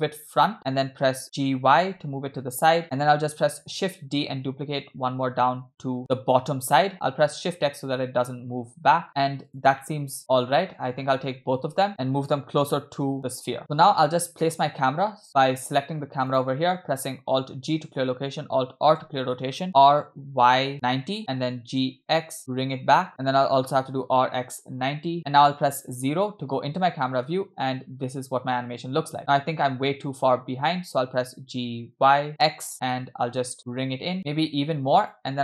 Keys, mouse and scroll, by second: 1.2 g, 3.8 shift+d, 9.8-10.8 middle drag, 11.4 scroll down 2, 11.9 shift+click, 13.0 g, 13.6 middle click, 13.6-14.1 scroll down 2, 14.2 scroll down 1, 14.4 middle click, 15.1-15.7 scroll down 2, 16.3 click, 17.8 alt+g, 19.0 alt+r, 19.8 r, 21.7 g, 23.5 r, 25.9 KP_0, 27.6 space, 29.2 space, 32.1 g.